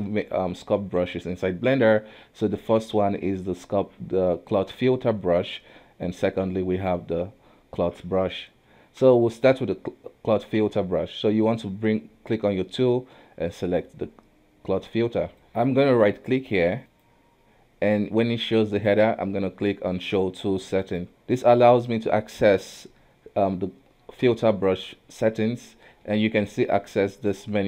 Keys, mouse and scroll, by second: 10.9 space, 11.9 space, 15.4-16.8 middle drag, 16.8-20.0 right drag, 21.1-23.9 middle drag.